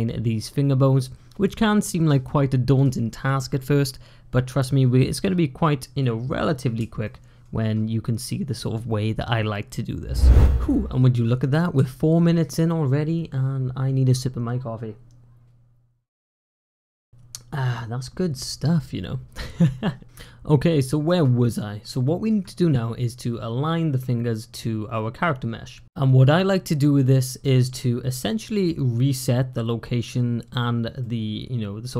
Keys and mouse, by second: 6.9 shift+click, 11.6 F1, 21.9 shift+click, 30.8-31.9 middle drag.